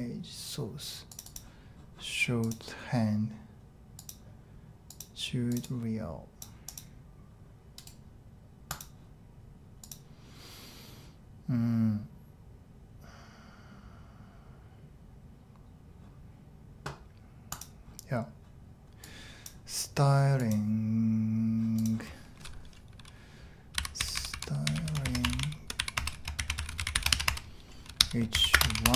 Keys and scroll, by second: 23.5-28.9 typing.